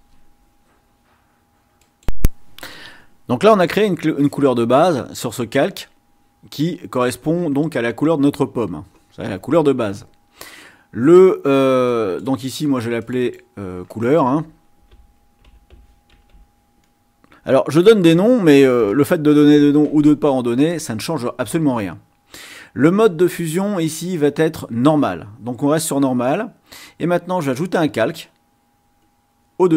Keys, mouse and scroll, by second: 1.8 click, 12.0 click, 13.1 click, 14.7-16.9 typing, 18.2 BackSpace, 18.5 r, 19.0 Return, 27.5 click.